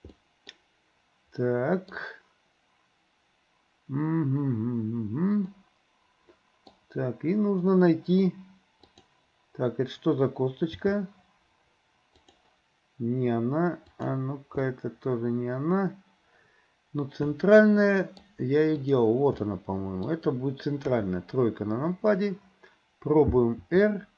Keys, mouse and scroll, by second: 0.2 middle click, 1.4 middle click, 5.5-6.8 middle drag, 8.9 click, 10.8 g, 13.9 click, 14.6-18.3 middle drag, 18.8 click, 19.5 middle click, 20.9 KP_3, 23.6 r.